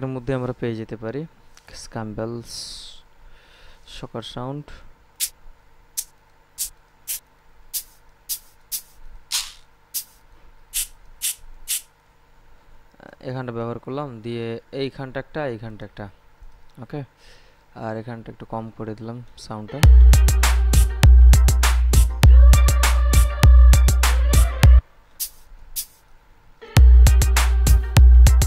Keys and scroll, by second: 19.8 space, 24.9 space, 26.9 space.